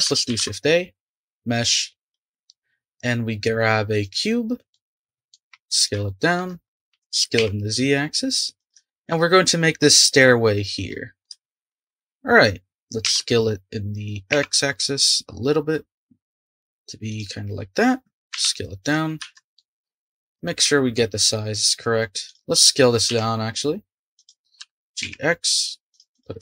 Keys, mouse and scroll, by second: 0.3 shift+a, 2.3 shift+a, 4.6 scroll down 1, 4.7-5.5 middle drag, 5.5 s, 6.0-6.6 shift+middle drag, 6.6 scroll up 1, 6.9 s, 8.9-13.0 shift+middle drag, 13.0 s, 18.3 s, 19.5-20.5 shift+middle drag, 20.5-20.9 scroll up 1, 20.9-22.3 middle drag, 22.3 click, 23.1 s, 24.6 g, 26.1 click.